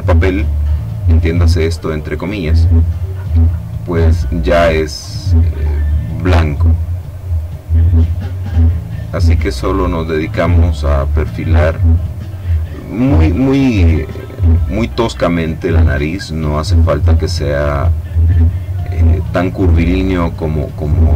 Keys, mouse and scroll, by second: 0.0 click, 2.7 click, 4.2 click, 5.2 click, 6.6 click, 7.6 click, 9.0 click, 9.7 click, 10.8 click, 12.7 click, 13.9 click, 14.8 click, 15.9 click, 17.0 click, 18.3 click, 19.6 click, 20.7 click.